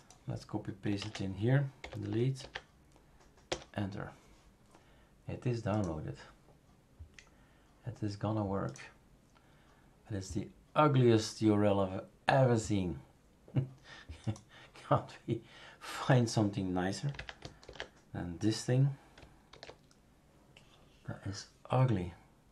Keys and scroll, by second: 1.0 ctrl+a, 1.8 Delete, 2.4 ctrl+v, 3.5 Return, 17.6 ctrl+f, 19.6 super+f.